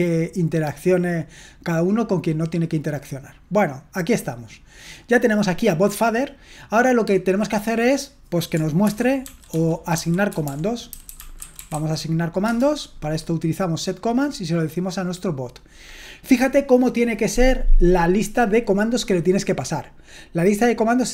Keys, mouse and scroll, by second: 9.2-12.2 typing, 12.5 Return.